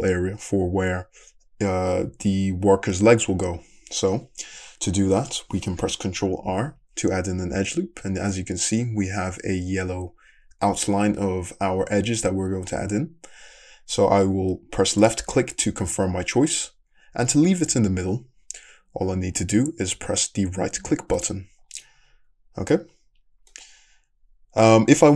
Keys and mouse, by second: 6.6 ctrl+r, 19.1-25.1 middle drag.